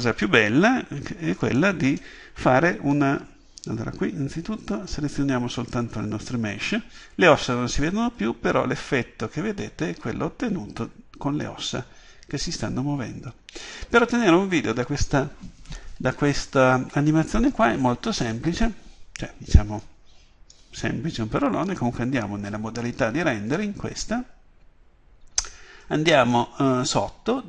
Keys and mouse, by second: 1.5-6.6 drag, 7.4-9.2 drag, 13.8-15.5 drag.